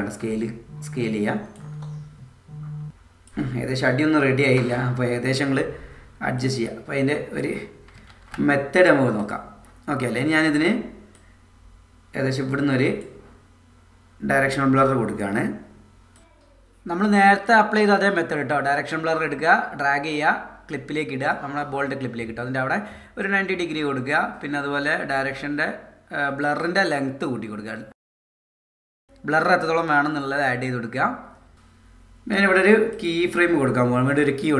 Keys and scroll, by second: 8.1 super+z.